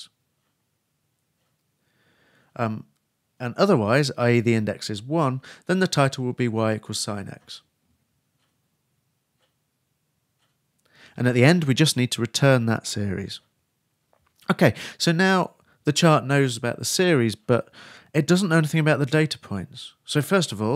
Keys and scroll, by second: 1.0-2.3 typing, 2.7 shift+Right, 5.9 shift+space, 5.9 shift+[, 6.1 shift+Return, 9.1-10.4 typing, 11.5-13.4 typing.